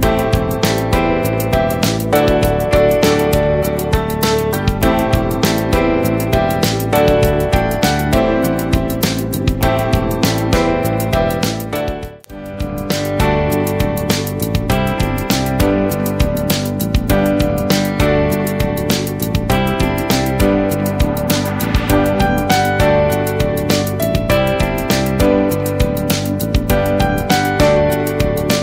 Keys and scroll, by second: 11.9 space, 13.0 ctrl+-, 17.4 Right, 20.5 space, 21.3 ctrl+space, 22.1 space, 24.9 ctrl+t, 28.0 ctrl+-.